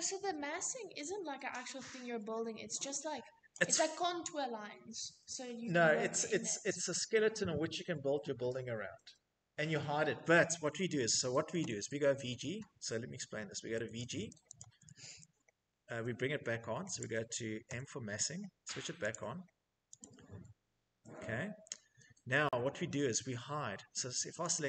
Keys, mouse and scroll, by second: 3.0 click, 10.6-11.5 typing, 12.5 Escape, 13.3-14.4 typing, 14.0 click, 16.0 scroll, 16.5-17.2 middle click, 17.2 m, 18.6 click, 19.5 click, 24.0 click.